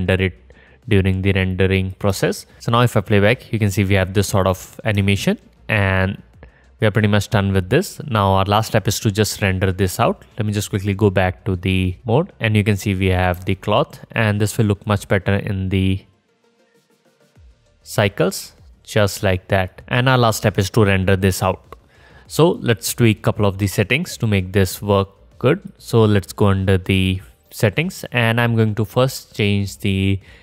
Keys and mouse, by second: 3.4 space, 5.3 middle drag, 5.5-11.8 middle drag, 5.9 space, 11.8 click, 12.2 space, 13.0 click, 14.3 space, 16.3 click, 16.4-16.9 right drag, 17.0-17.6 right drag, 17.6 click, 18.2 right click, 18.6-23.5 drag, 19.7-23.6 middle drag, 19.7-23.5 right drag, 23.6-26.4 drag, 26.4 middle click, 26.8-30.4 drag.